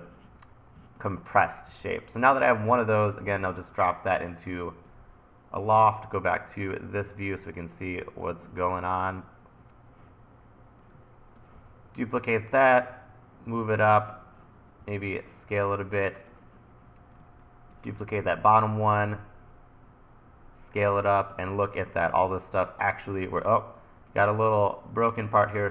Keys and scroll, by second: 0.8 1, 1.7 e, 11.6 e, 14.8 t, 18.0 e, 23.6 1.